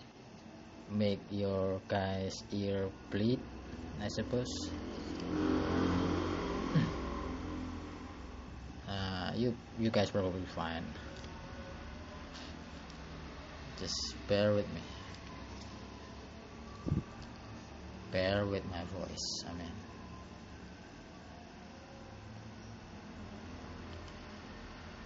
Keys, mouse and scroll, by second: 1.2 click, 2.5 click, 4.8-5.5 scroll down 7, 5.5-8.3 scroll up 22, 8.3 scroll up 1, 8.8 click, 10.4 click, 16.0 click, 17.8 click, 19.3 click.